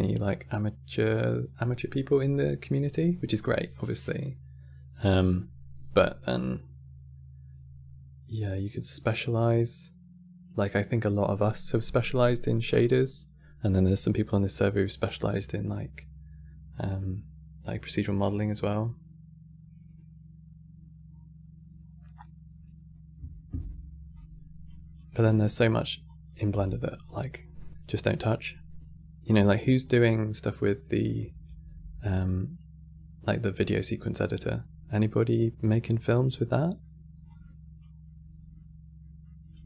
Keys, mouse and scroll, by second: 24.5 middle click, 24.9 scroll down 5, 25.1 middle click, 25.7 click, 26.2 g, 27.1 middle click, 27.9 click, 36.0-37.0 middle drag, 37.0 click, 37.8-39.6 middle drag.